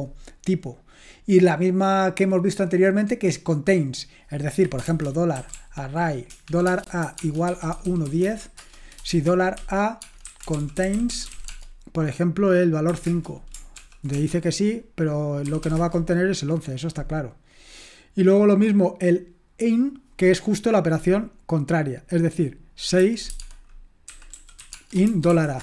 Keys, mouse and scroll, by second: 3.2 Delete, 4.6-11.8 typing, 13.0 Return, 13.7 ctrl+p, 14.1 typing, 15.6 typing, 15.7 Return, 17.5-19.7 scroll down 1, 19.7-23.0 scroll down 1, 23.0-23.3 scroll down 1, 23.3-25.6 typing.